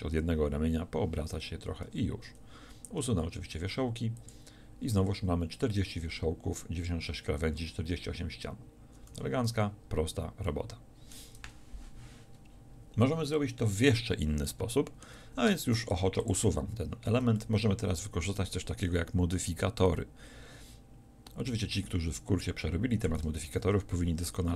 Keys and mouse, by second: 1.9 a, 3.5 w, 9.2 a, 15.5 Tab, 16.0 x, 23.5 shift+a.